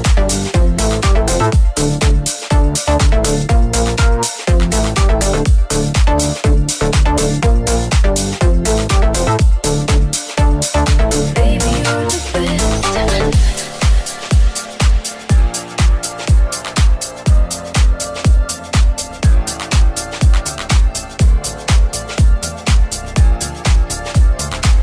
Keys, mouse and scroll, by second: 20.6 middle click, 21.0-22.7 middle drag, 23.0-24.8 middle drag, 23.4 g, 24.6 g.